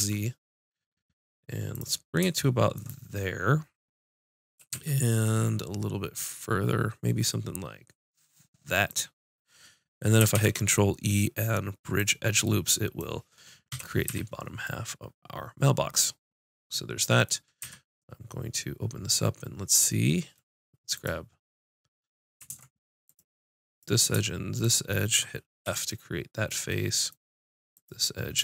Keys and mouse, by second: 1.8-4.6 drag, 4.6 g, 9.0-10.4 drag, 10.4 ctrl+e, 13.7 KP_5, 14.1 z, 17.6 z, 21.0-22.5 drag, 22.5 ctrl+Tab, 23.7-25.0 drag, 25.6 f, 25.8 click, 27.7-28.4 drag.